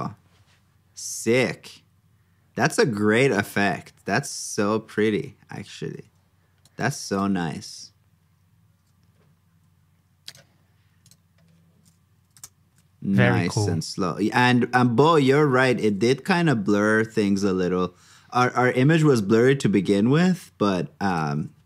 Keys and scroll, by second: 12.3 super+j, 15.8 super+j, 21.2 super+s.